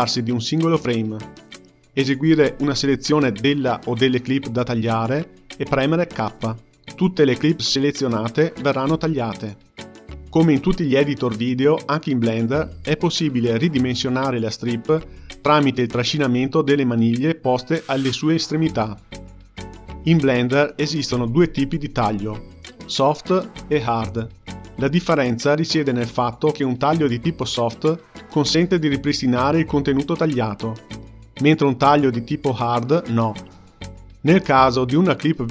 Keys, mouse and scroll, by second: 0.9 click, 3.1 k, 5.8-8.8 drag, 10.9-12.5 drag, 13.0-16.1 drag, 17.7 ctrl+z, 17.9 ctrl+z, 18.1 ctrl+z, 18.3 ctrl+z, 18.5 ctrl+z, 18.8 ctrl+z, 19.1 ctrl+z, 19.4 ctrl+z, 19.9 ctrl+z, 20.1 ctrl+z, 20.7 ctrl+z, 21.1 ctrl+z, 21.5 ctrl+z, 21.8 ctrl+z, 22.2 ctrl+z, 22.4 ctrl+z, 28.6 k, 31.0-34.0 drag, 34.5-35.5 drag.